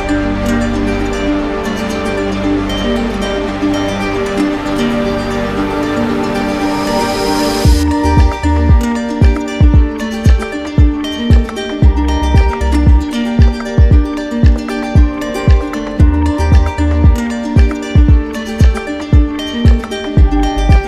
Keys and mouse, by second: 1.8 click, 3.2 right click, 4.9-7.1 right drag, 8.8 alt+right click, 9.5 alt+right click, 15.7 click, 18.6 click, 19.4 alt+click.